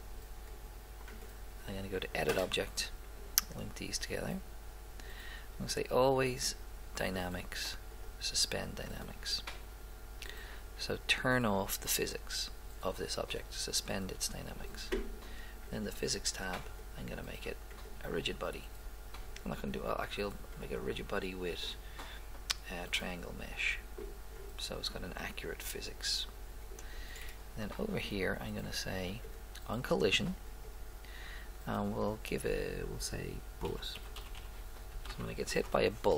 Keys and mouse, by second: 4.3-6.1 drag, 6.2 click, 15.7 click, 20.7-23.3 drag, 29.2 click, 32.1-33.8 drag, 34.4 l.